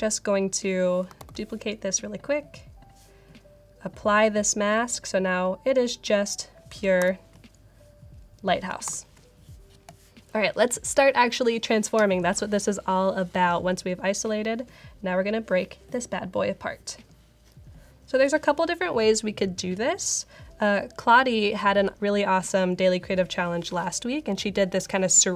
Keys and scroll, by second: 1.1 super+j, 6.9 alt+super+8, 8.9 alt+super+8.